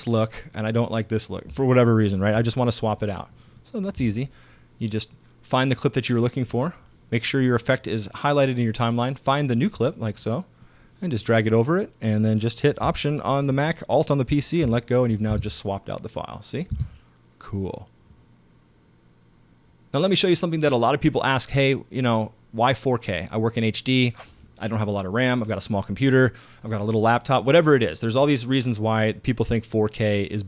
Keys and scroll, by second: 15.3 alt+space, 16.7 space.